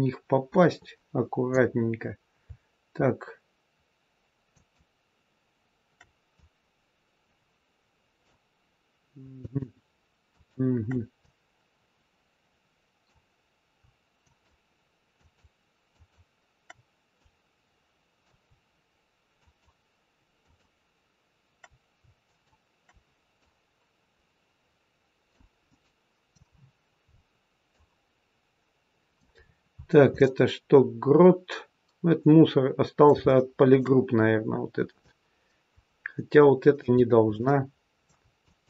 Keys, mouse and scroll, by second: 1.7-2.3 scroll down 2, 2.3-3.4 scroll down 1, 4.4 shift+click, 6.2 click, 11.1 click, 14.1 shift+click, 17.1 click, 19.3 shift+click, 21.5 shift+click, 23.4 click, 25.6 middle click, 26.4-27.6 scroll up 9, 27.6 click, 29.3-30.1 scroll down 6, 30.1 middle click, 34.1-35.0 scroll up 3, 35.0 click, 36.9-37.3 scroll down 1, 37.3 middle click, 38.3 shift+click.